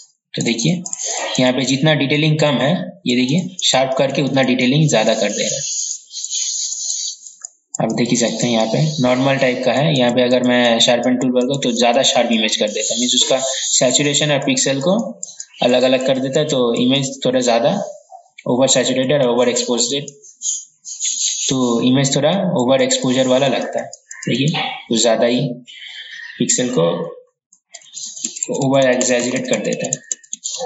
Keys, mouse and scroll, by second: 27.6 ctrl+z, 27.9 ctrl+z, 28.1 ctrl+z, 28.3 ctrl+z, 28.5 ctrl+z, 28.7 ctrl+z, 28.9 ctrl+z, 29.1-30.6 typing.